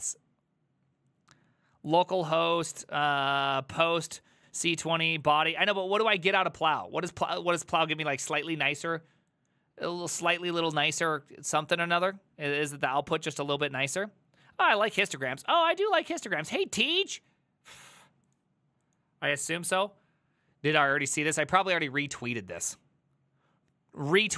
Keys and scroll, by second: 15.2 alt++.